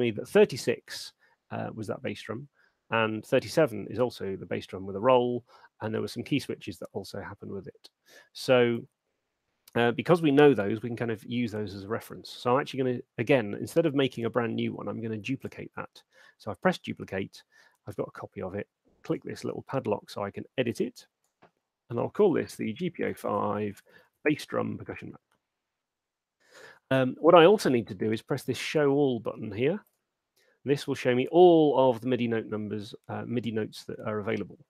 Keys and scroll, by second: 22.0-24.9 typing.